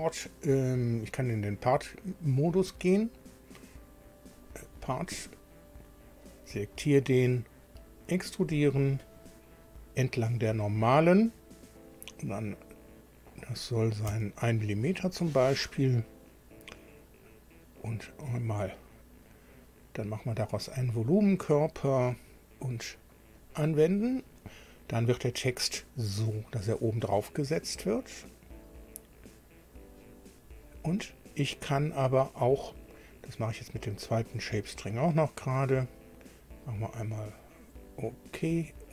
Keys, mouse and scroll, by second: 2.3 click, 4.3 click, 6.3 click, 8.4 click, 14.1 1, 18.8 click, 20.6 click, 22.1 click, 23.4 click, 34.1 click, 37.0 click.